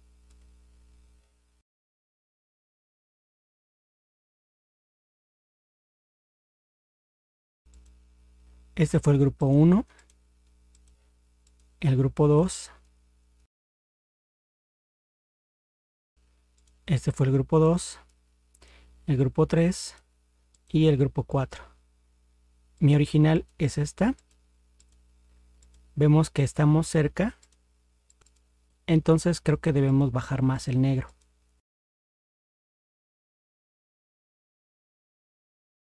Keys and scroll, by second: 1.6 ctrl+0.